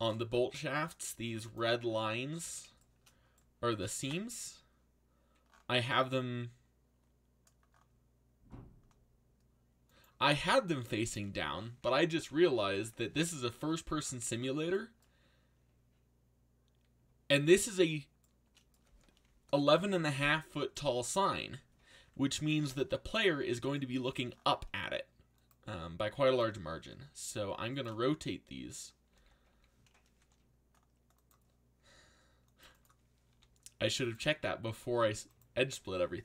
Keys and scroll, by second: 4.0 alt+a, 12.2 ctrl+l, 27.3 r, 29.1 ctrl+z, 30.1 c, 33.3 r.